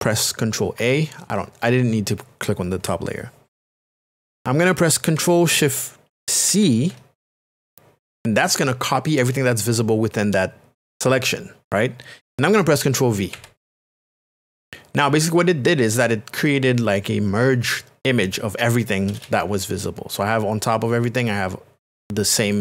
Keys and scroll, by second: 0.8 ctrl+a, 13.3 ctrl+v.